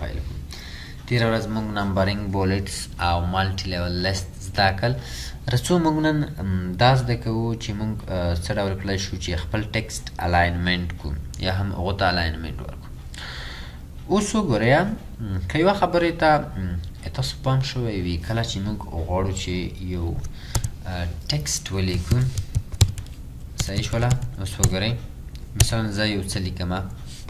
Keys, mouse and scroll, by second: 20.6 Return, 21.9-24.6 typing, 25.6 Return.